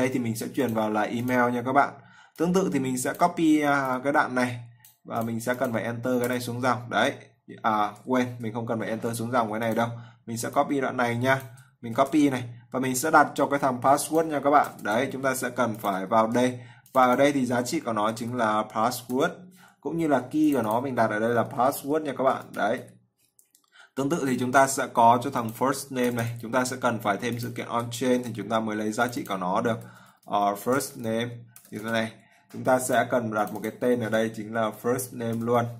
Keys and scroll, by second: 8.7 ctrl+z, 11.8 ctrl+c, 16.0 ctrl+v, 27.9 ctrl+v.